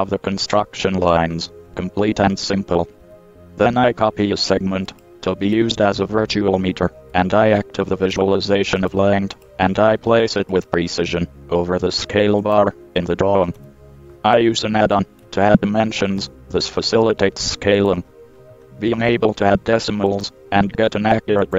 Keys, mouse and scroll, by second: 1.5 KP_7, 1.9 KP_5, 3.2 z, 5.1 right click, 5.7 Tab, 6.8 z, 7.3 z, 8.4 a, 9.0 right click, 10.3 shift+d, 12.6 click, 13.7 KP_7, 15.1-16.4 middle drag, 16.4 g, 19.0 middle click, 21.2-21.5 middle drag.